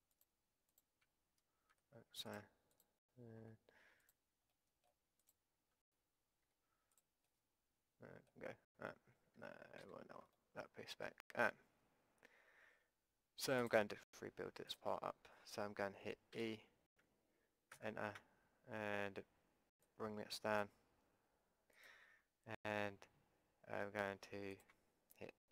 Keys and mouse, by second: 1.4 click, 1.7 Delete, 3.4 Delete, 5.3-8.4 drag, 6.4 Delete, 9.8 ctrl+z, 13.6-16.4 drag, 16.4 e, 19.8-23.8 drag, 24.5-25.5 drag.